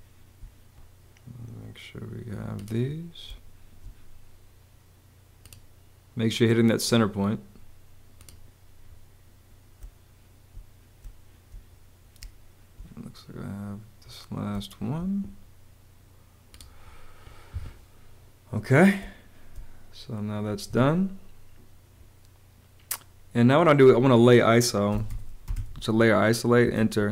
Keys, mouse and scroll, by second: 3.2 space, 9.7 space, 11.0 space, 12.2 space, 14.4 space, 18.9 space, 20.6 Escape, 24.6-27.0 typing, 26.7 Return.